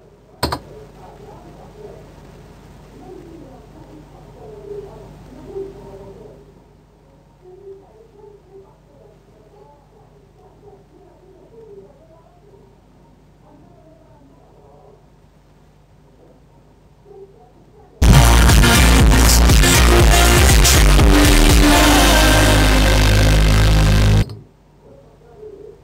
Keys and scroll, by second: 0.7 Return.